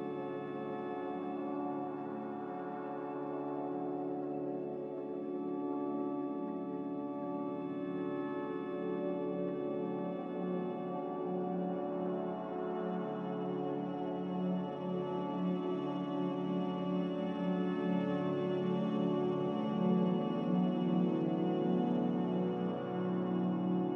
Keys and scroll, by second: 0.1 Return, 0.9 typing, 2.5-3.3 typing, 4.4 n, 7.5 a, 9.4 ctrl+g, 20.0 n.